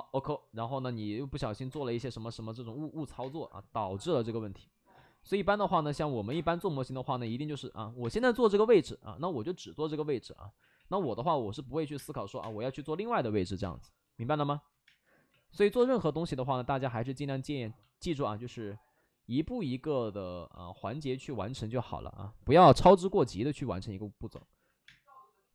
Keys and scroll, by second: 0.7 ctrl+z, 1.6 space, 3.1 space, 3.9 5, 4.9 ctrl+z, 5.8 ctrl+z, 6.0 ctrl+z, 6.2 space, 7.2 space, 7.6 ctrl+z, 7.9 space, 9.1 ctrl+z, 10.5 ctrl+z, 10.6 ctrl+z, 11.9-13.5 typing, 14.6 ctrl+z, 14.7 space, 15.2 ctrl+z, 15.7 space, 16.7 ctrl+z, 19.5 ctrl+z, 20.8 ctrl+z, 21.1 ctrl+z, 22.5 4, 22.7 5, 22.7 space, 24.5 ctrl+z, 24.8 space.